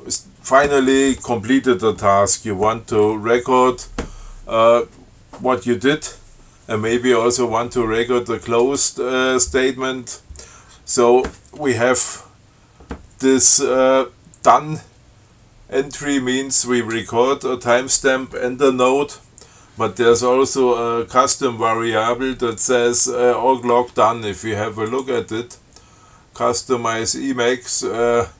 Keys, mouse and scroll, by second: 25.1 click.